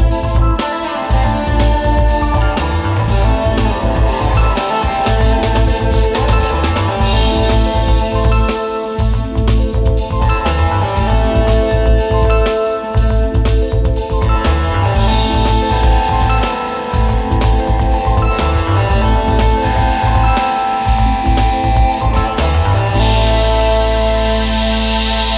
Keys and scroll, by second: 0.3 super+z, 1.4 space, 2.1 space, 2.3 space, 3.6 space, 4.1 super+c, 5.3 super+c, 5.5 super+z, 6.6 super+c, 7.5 super+v, 8.5 space, 9.1 space, 9.7 space, 10.3 space, 11.6 space, 14.2 super+[.